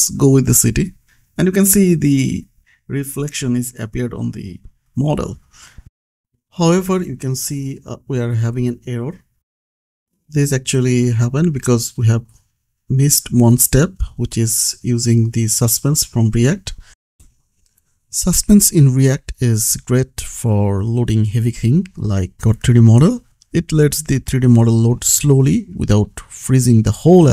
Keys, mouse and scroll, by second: 0.4 ctrl+s, 2.2 click, 2.4-4.0 scroll up 1, 4.0 click, 5.6-6.4 scroll up 1, 6.4-7.0 scroll down 1, 7.0 click, 10.9-11.3 scroll up 1, 12.6 click, 13.1-14.0 scroll up 1, 14.0 click, 16.2 click, 18.8 Return, 19.7 m, 20.2 Return, 20.6 space, 22.1 shift+s, 23.0 s, 23.8 Return, 26.0 click, 26.4 ctrl+c, 27.2 click.